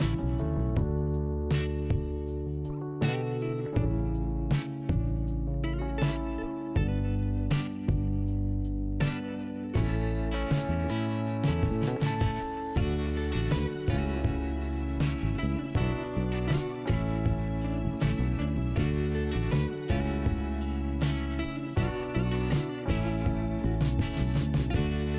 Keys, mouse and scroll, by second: 2.4 click, 3.8-4.2 scroll up 1, 5.0 click, 8.3 click, 9.1 double click, 9.2 double click, 10.4 click, 15.0 click, 16.6 scroll down 2, 17.3 scroll up 1, 18.5 5, 19.2 5, 19.9 5, 20.6 right click, 21.4 click, 23.8 click, 24.5 click, 25.0 click.